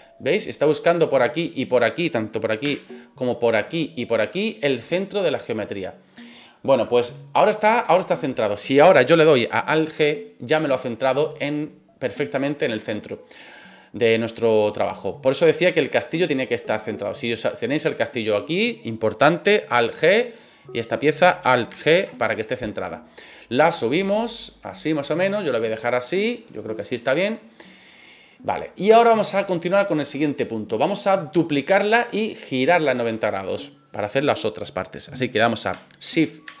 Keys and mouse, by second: 2.6 KP_3, 4.9-6.0 middle drag, 9.8 alt+g, 11.2-12.9 middle drag, 14.1 middle drag, 16.9-17.3 right drag, 17.8-18.5 middle drag, 19.7 alt+g, 20.6 right click, 21.9 alt+g, 22.5-22.8 middle drag, 23.3-25.9 drag, 26.1-27.4 middle drag, 28.2 middle drag, 29.0-29.4 middle drag, 36.4 shift+d.